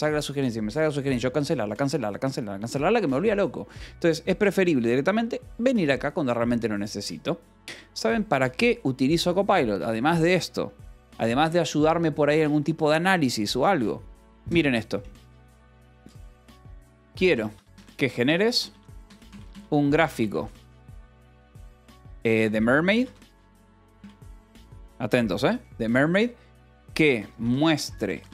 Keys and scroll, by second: 16.6-24.2 typing, 26.2-28.3 typing.